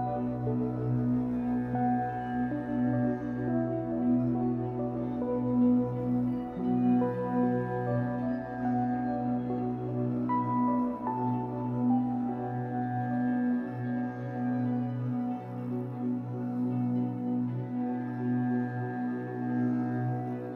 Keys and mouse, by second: 5.2-8.6 shift+drag, 9.8 space, 10.8-13.0 drag, 16.5 click, 18.9 click, 20.0 click.